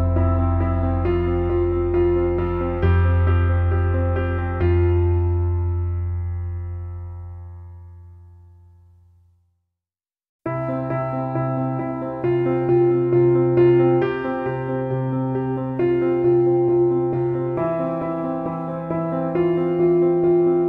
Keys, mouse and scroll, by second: 1.1-2.3 drag, 2.3 click, 3.2-5.7 drag, 6.1 scroll down 1, 6.9-9.3 drag, 10.2 scroll down 1, 11.0 click, 11.6 scroll down 1, 11.8 click, 12.7 ctrl+-, 13.1 space, 13.2 click, 13.3 space, 14.6-16.7 drag, 16.7 click, 18.9-19.4 scroll up 1, 20.3 scroll down 1.